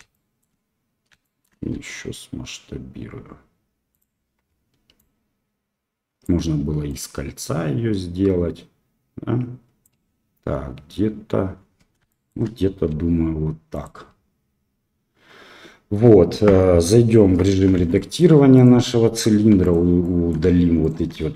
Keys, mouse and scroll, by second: 0.2 shift+click, 1.2 shift+click, 1.7 s, 4.9-6.2 drag, 6.8-9.8 drag, 12.0 shift+middle click, 12.9 s, 17.2 Tab, 17.7 shift+z, 17.9 middle click, 18.5 click, 19.5 3, 19.6 click, 20.0 middle click, 20.8 shift+click.